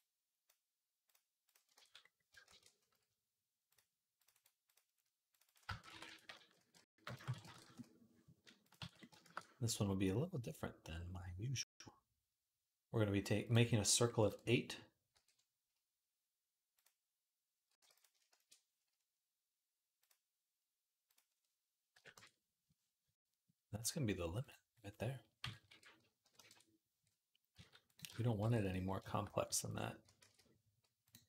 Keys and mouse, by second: 0.2 middle click, 0.9 click, 1.4 ctrl+middle click, 1.6 ctrl+s, 2.2 shift+a, 3.9 click, 4.1-17.9 right drag, 5.2-8.5 shift+drag, 5.5-8.5 shift+middle drag, 8.7 ctrl+s, 9.0 shift+a, 14.9 alt+g, 16.6-17.9 drag, 16.6-17.9 middle drag, 17.7 x, 18.1 shift+a, 22.4-27.7 drag, 22.4-27.7 middle drag, 22.4-29.8 right drag, 25.2 KP_1, 25.4 r, 27.3 s, 28.2 g, 29.3 g, 29.8 ctrl+click, 30.0 ctrl+a, 30.1-31.2 right drag.